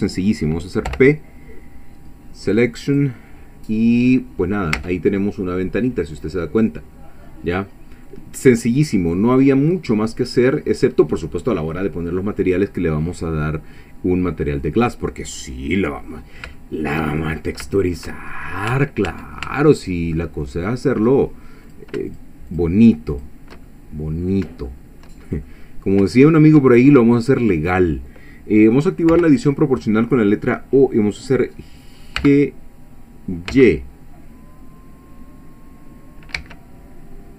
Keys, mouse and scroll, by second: 0.9 p, 2.9 click, 4.0 scroll down 1, 4.5 scroll up 1, 4.8 Tab, 5.2-8.2 middle drag, 8.4-8.8 scroll up 2, 9.0 scroll down 2, 9.8-10.1 scroll down 2, 10.5-11.7 middle drag, 11.9 scroll down 1, 12.5-12.9 scroll up 2, 13.1-13.6 scroll down 2, 13.6-15.5 middle drag, 16.6-17.6 shift+middle drag, 17.7 shift+middle click, 18.3-18.7 shift+scroll up 2, 18.6 middle click, 18.7 Tab, 19.8-20.9 middle drag, 21.1 scroll up 1, 21.7 click, 22.1 shift+click, 22.5 shift+click, 23.1 shift+click, 23.7 shift+middle click, 24.7 shift+middle click, 25.5 shift+middle click, 27.1 middle click, 29.1 o, 31.6 scroll down 2, 32.0 scroll up 2, 32.2 g, 33.5 x, 36.4 Escape, 36.7 middle click, 36.7 scroll down 1.